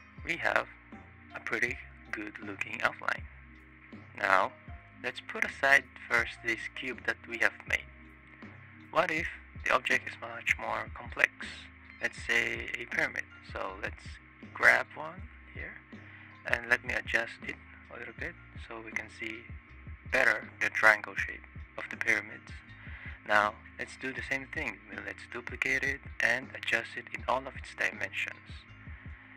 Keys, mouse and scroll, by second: 2.7 click, 3.1-4.3 drag, 5.2 click, 5.8 click, 7.1 click, 7.6 click, 8.6 click, 9.1 shift+click, 9.5 click, 10.1 space, 11.6 shift+drag, 12.0 click, 12.3 click, 13.0 click, 13.5 click, 14.3 click, 15.0 click, 15.6-16.2 drag, 16.4 space, 17.6 space, 19.7-20.2 shift+drag, 20.4 click, 21.0 middle click, 22.6 ctrl+d, 23.1 space, 26.7-27.2 drag, 28.6-29.0 drag.